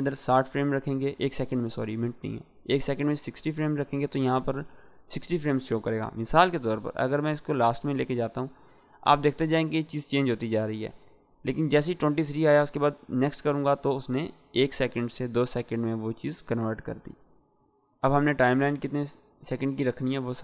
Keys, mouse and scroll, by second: 7.1-14.0 drag, 20.3-20.4 drag.